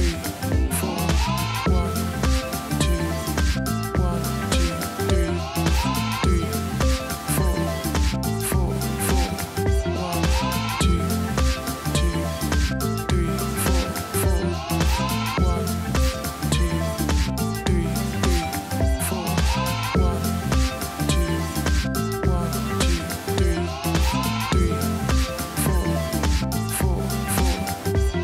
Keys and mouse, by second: 0.2 click, 1.6 click, 2.8 click, 4.8 click, 7.2 z, 10.1 i, 10.7 click, 11.5 alt+BackSpace, 12.9 click, 13.8 click, 14.5 click, 15.4 click, 15.8 space, 16.0 click, 16.3 space, 18.8 i, 19.5 click, 20.1 alt+BackSpace, 21.1 ctrl+d, 21.8 ctrl+KP_0, 23.7 click, 25.0 alt+Num_Lock, 25.5 ctrl+alt+shift+e.